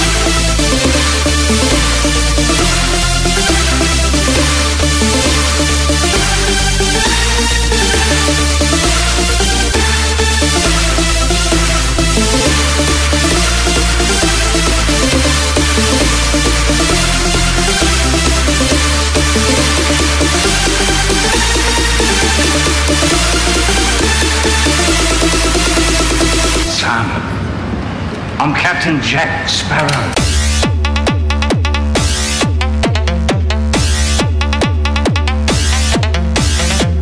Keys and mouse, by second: 15.8-24.4 right drag, 24.4-27.2 drag, 30.5-35.2 drag.